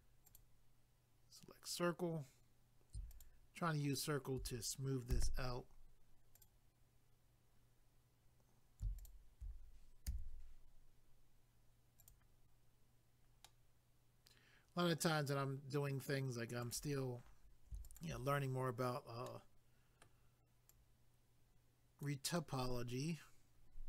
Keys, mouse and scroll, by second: 0.2 click, 0.4 click, 3.1 alt+click, 3.9 alt+click, 5.1 w, 6.4 click, 9.0 alt+click, 10.1 w, 12.0 click, 13.4 middle click, 16.6 click, 16.7 click, 17.8 shift+click, 18.0 shift+click, 18.5 scroll up 1, 19.3 middle click, 20.7 click, 22.4 middle click.